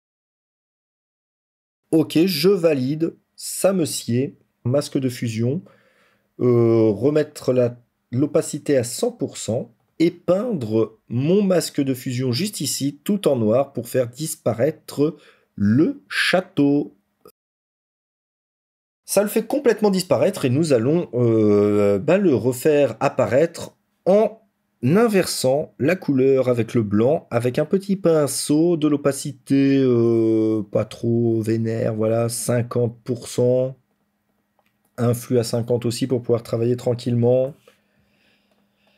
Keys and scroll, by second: 36.9 ctrl++, 37.1 ctrl++.